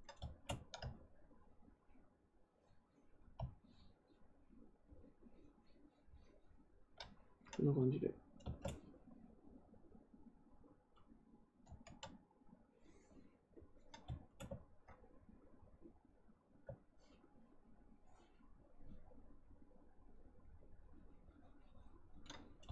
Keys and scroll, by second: 11.6 ctrl+z.